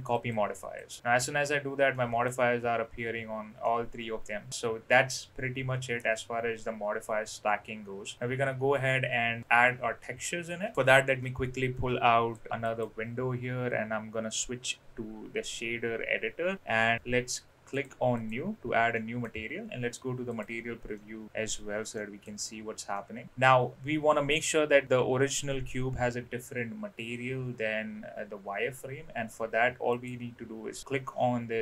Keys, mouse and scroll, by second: 0.8 click, 1.0 middle click, 1.9-2.2 middle drag, 3.6-4.5 middle drag, 10.7-12.3 drag, 12.7-16.6 drag, 17.0 n, 17.8 click, 18.9 middle click, 21.4 click, 22.0 middle click, 22.9 middle click, 29.9 click.